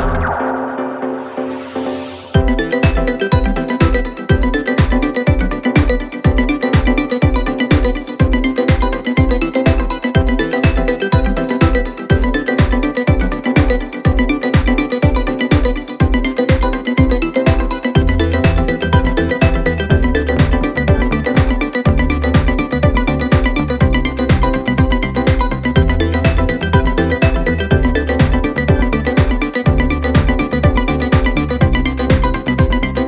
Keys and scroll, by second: 3.6 0, 3.8 ., 4.0 1, 4.2 Return, 10.7 space, 12.4 space, 13.9 space, 16.0 space.